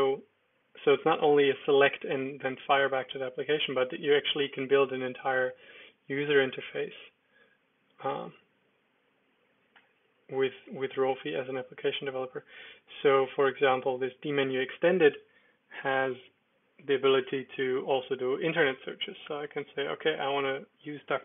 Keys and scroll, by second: 1.0 Down, 3.2 Up, 3.6 Return, 4.9 Page_Down, 7.8 Up, 8.0 Up, 9.8 Escape, 10.6 alt+space, 11.8 Down, 16.3 Return, 19.2 Return.